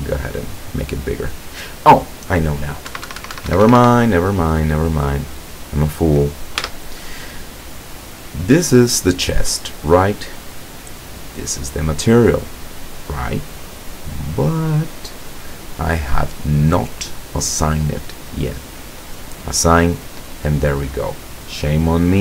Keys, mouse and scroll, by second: 3.0 Escape, 5.4 right click, 6.7 Tab, 10.7 click, 13.9-14.7 scroll up 3, 19.2 click, 21.7-22.0 scroll up 1.